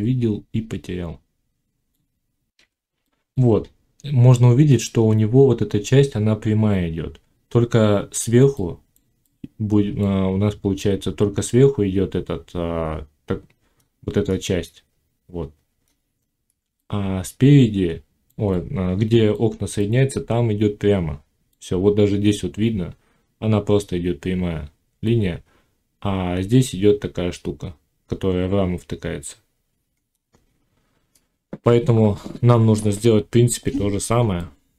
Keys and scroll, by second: 2.6 F9.